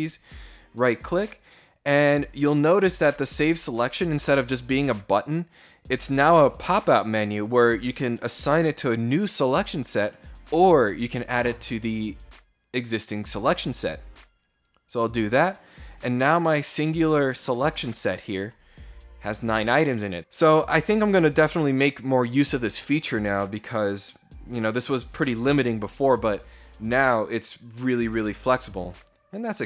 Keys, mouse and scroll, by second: 0.0 right click, 13.5 click, 15.4 click, 16.2 click, 16.9-18.0 middle drag.